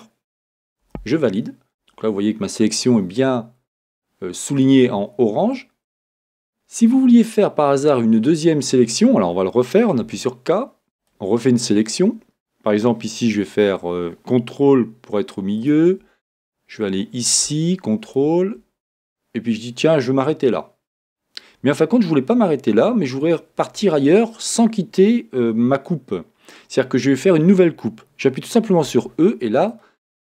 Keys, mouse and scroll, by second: 0.9 Return.